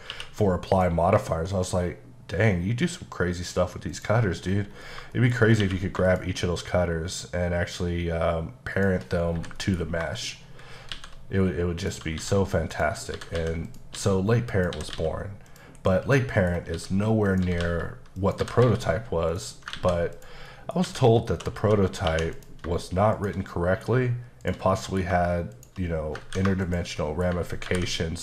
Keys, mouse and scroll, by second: 0.1 q, 0.7 click, 3.9 click, 4.7 scroll up 3, 5.2 shift+middle click, 5.4 scroll up 1, 5.6 q, 6.1 shift+click, 6.8 click, 6.9 shift+click, 8.7 shift+double click, 9.2 scroll down 2, 9.4 h, 10.2 shift+middle click, 10.9 shift+a, 11.8 click, 12.2-18.6 typing, 12.7 click, 13.7 click, 14.5 click, 15.5 click, 16.1 middle click, 17.3 click, 18.2 click, 19.3 click, 19.8 ctrl+a, 20.2 click, 20.5 middle click, 20.9 Tab, 21.4-22.1 typing, 22.4 click, 23.2 shift+click, 23.5 middle click, 24.4 shift+click, 24.7 middle click, 25.5 shift+click, 26.3 ctrl+z, 26.7 shift+click, 26.9 click, 27.0 middle click, 27.7 ctrl+b.